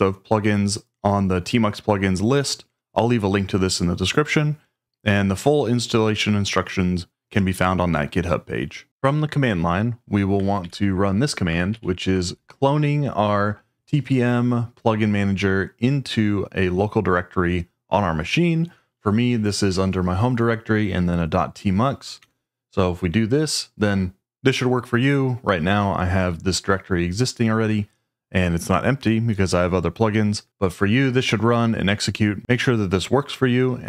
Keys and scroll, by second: 10.6 super+v, 11.7 Tab, 22.2 Return.